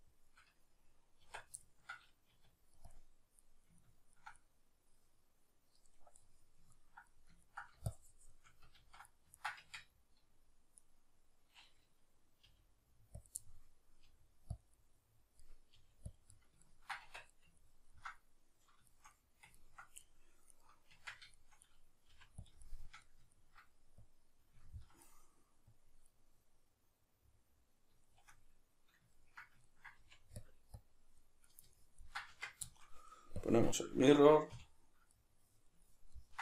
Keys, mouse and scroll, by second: 1.2 Tab, 2.3 q, 2.9 click, 3.4-8.0 middle drag, 8.0-9.4 shift+drag, 8.8 ctrl+z, 9.4-10.8 ctrl+middle drag, 9.6 Tab, 10.8 right click, 12.4 g, 13.3 click, 13.4-14.7 middle drag, 14.1 g, 14.7 click, 14.8-15.8 middle drag, 15.8 g, 16.2 click, 16.4 ctrl+middle click, 17.0 Tab, 17.3-20.5 middle drag, 20.5 right click, 20.9 Tab, 21.3-22.5 shift+middle drag, 22.1 f, 22.5 shift+click, 22.6-24.0 shift+middle drag, 24.0 click, 24.6-25.7 ctrl+middle drag, 25.7 click, 26.1-30.5 middle drag, 30.0 f, 30.8 click, 31.5 ctrl+middle click, 32.4 Tab, 32.7-33.4 shift+middle drag, 33.4 click, 33.8-34.5 ctrl+middle drag, 34.5 \, 35.2-36.4 middle drag.